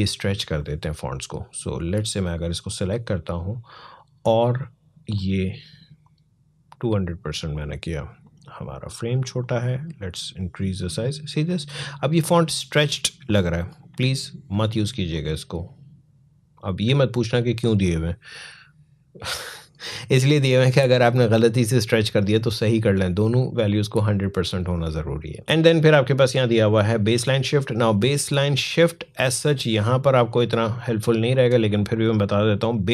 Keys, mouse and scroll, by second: 0.2-4.9 drag, 4.9-21.6 drag, 27.9-29.8 drag.